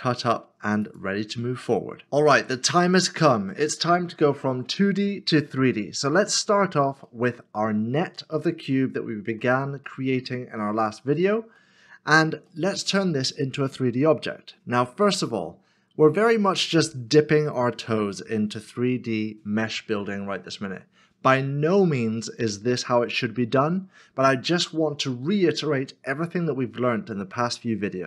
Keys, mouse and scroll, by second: 3.5 Return, 3.6 middle click, 6.4 shift+middle click, 7.3 middle click, 8.9 shift+middle click, 9.9 middle click, 11.6 shift+middle click.